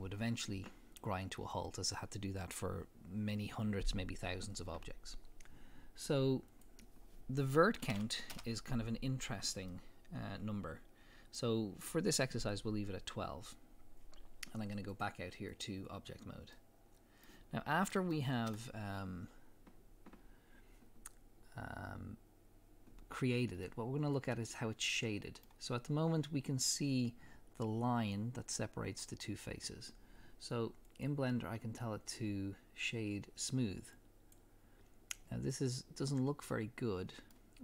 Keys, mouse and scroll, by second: 6.5-9.7 drag, 8.4 Return, 9.7-14.9 middle drag, 14.9-16.6 drag, 16.6-22.1 middle drag, 23.7-27.7 middle drag, 30.9-35.5 drag, 35.5-37.6 middle drag.